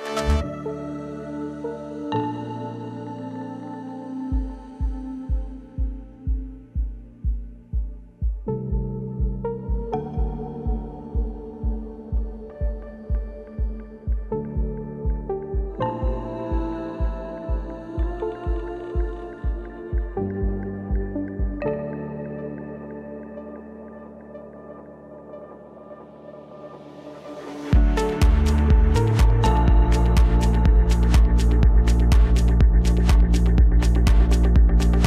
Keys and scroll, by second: 7.7 ctrl+d, 11.2 Delete.